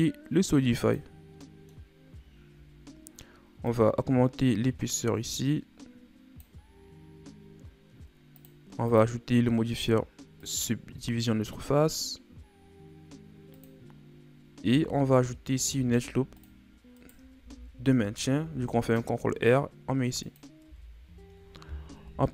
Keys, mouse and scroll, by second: 1.4 middle click, 1.8-2.4 scroll up 5, 3.6-6.6 shift+drag, 7.0-8.3 scroll up 1, 8.3-11.9 drag, 13.5-14.7 drag, 14.7 Tab, 15.6 ctrl+r, 17.4 ctrl+z, 18.3 ctrl+r, 20.6 Tab, 20.9 a, 22.0 KP_1.